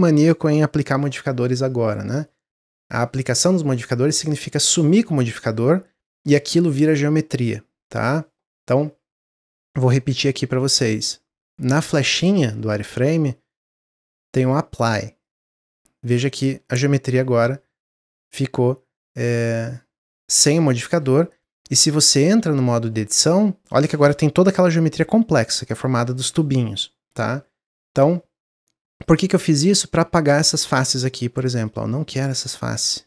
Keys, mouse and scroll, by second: 4.8-8.0 drag, 9.7-12.4 middle drag, 12.4 click, 14.0-16.1 drag, 16.1-19.2 middle drag, 29.0 click, 30.1 shift+click, 30.8 shift+click, 31.6-33.0 shift+drag.